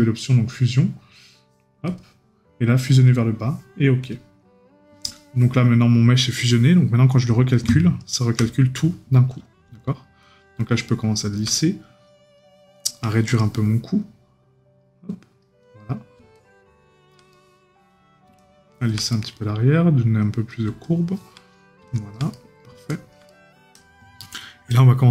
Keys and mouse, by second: 17.3 right click, 19.1 right click, 22.3 right click.